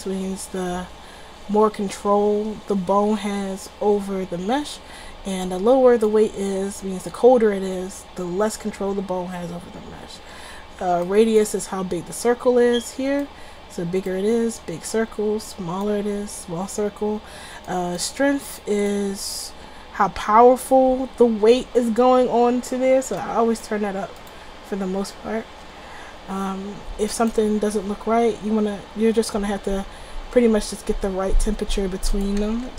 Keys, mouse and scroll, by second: 5.5-7.2 drag, 11.1-12.7 drag, 25.0-27.4 middle drag, 27.4-28.6 drag, 29.2 r, 32.3 middle drag, 32.5 a, 32.7 a.